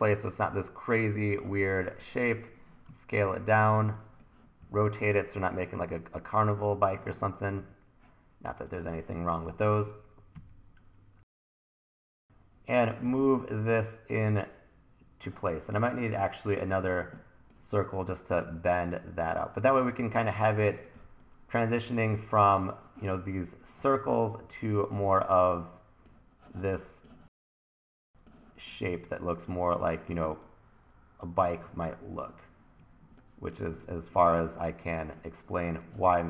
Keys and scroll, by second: 1.8 t, 4.6 r, 9.5 e, 9.8 w, 13.1 e, 21.0 t, 23.8 t, 30.2 t, 32.8 1, 36.0 t.